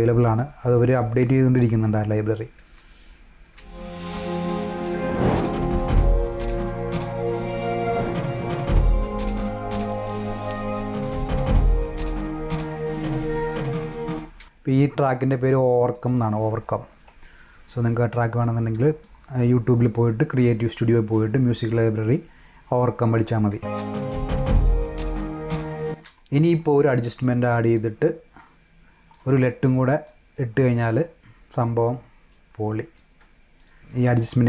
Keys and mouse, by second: 10.8 -, 11.1 -, 14.1 space, 15.9 click, 18.3 click, 19.7 click, 27.1 click, 27.7-29.1 drag, 30.0 click, 31.5-32.9 drag, 33.5 click, 33.9 click.